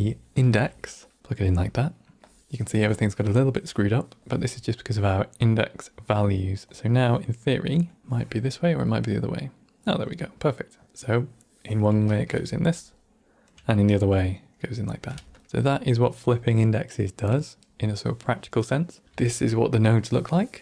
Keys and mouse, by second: 0.0-0.4 ctrl+middle drag, 1.2 click, 3.4-3.9 middle drag, 5.6 click, 6.2-6.8 middle drag, 8.0-8.8 drag, 11.9 middle click, 12.7 ctrl+right click, 14.5 click, 15.4 ctrl+alt+click, 15.4 ctrl+alt+right click, 16.0 ctrl+alt+click, 16.0 ctrl+alt+right click, 16.6 ctrl+alt+right click, 17.4 ctrl+alt+right click, 19.0 Tab, 19.0 click.